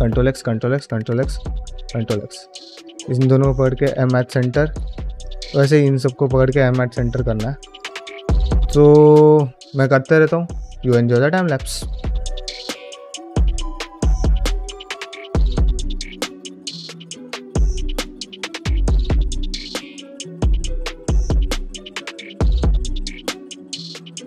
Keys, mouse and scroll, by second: 0.2 click, 0.5 ctrl+x, 0.9 click, 1.6 ctrl+x, 2.0 1, 2.2 click, 2.6 shift+click, 3.8 m, 4.3 middle click, 5.1 click, 5.5 shift+click, 5.8 shift+middle click, 7.0 m, 7.9 ctrl+space, 8.3 scroll down 1, 8.4-9.9 middle drag, 11.7 click, 12.0 shift+click, 12.3-19.3 typing, 12.5 middle click, 12.6 click, 13.0 shift+middle click, 13.4 click, 13.5 shift+click, 13.9 click, 14.0 shift+click, 14.4 middle click, 14.6 click, 14.7 shift+click, 15.5 middle click, 15.6 shift+middle click, 15.8 click, 16.1 shift+click, 16.3 shift+middle click, 16.9 middle click, 17.1 click, 17.3 shift+middle click, 17.6 shift+click, 17.7 middle click, 17.9 click, 18.1 middle click, 18.2 middle click, 18.3 shift+middle click, 18.6 shift+click, 18.7 middle click, 18.8 shift+click, 19.1 shift+middle click, 19.5 ctrl+x, 19.5 ctrl+click, 19.6 ctrl+x, 19.7 ctrl+x, 19.8 click, 19.9 ctrl+x, 20.1 ctrl+click, 20.4 click, 20.5 ctrl+x, 20.6 click, 20.7 ctrl+x, 20.7 middle click, 20.8 shift+middle click, 20.9 middle click, 21.1 ctrl+click, 21.2 click, 21.4 ctrl+x, 21.4 click, 21.5 ctrl+x, 21.5 click, 21.6 ctrl+x, 21.7 click, 21.8 ctrl+x, 21.8 middle click, 22.0 click, 22.3 ctrl+x, 22.3 click, 22.4 ctrl+x, 22.4 shift+middle click, 22.8 ctrl+x, 23.2 ctrl+x, 23.4 alt+click, 23.6 ctrl+x, 23.8 alt+click, 23.9 ctrl+x, 24.0 shift+middle click.